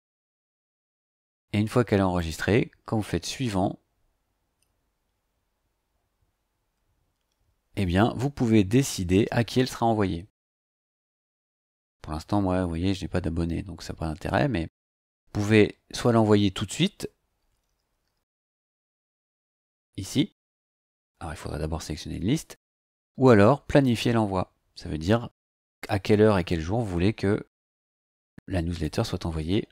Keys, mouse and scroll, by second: 2.2 click, 9.6-10.5 scroll down 2, 10.5 click, 14.8 click, 16.5 scroll down 2, 23.8 click, 28.8 click.